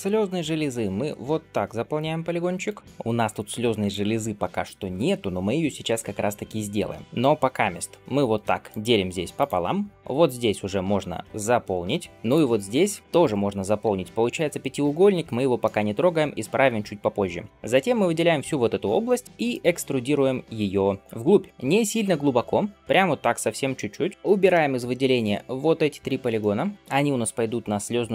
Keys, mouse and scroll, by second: 0.8 f, 7.9 ctrl+r, 11.3 f, 11.8 f, 12.5 alt+click, 15.1 scroll down 1, 15.5 shift+middle click, 17.5 click, 17.5 l, 19.1-20.3 shift+middle drag, 19.2 scroll down 1, 20.9 scroll up 1, 24.4 middle click, 24.9 c, 26.7-28.1 middle drag.